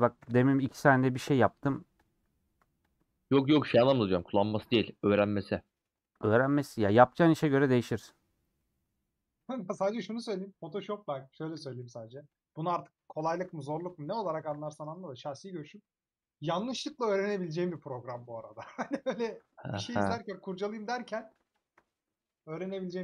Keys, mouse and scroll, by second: 0.3 ;, 0.9 middle click, 1.8 3, 1.9-3.0 drag, 3.7 ctrl+click, 4.7 ;, 5.3-7.2 middle drag, 7.2 2, 8.5 middle click, 9.3-9.7 scroll down 3, 9.7-11.6 middle drag, 13.4 ctrl+x, 13.5 middle click, 14.3 a, 16.1-18.6 middle drag, 18.6 2, 20.2-21.7 middle drag, 21.7 alt+click, 22.3 middle click, 22.8 a.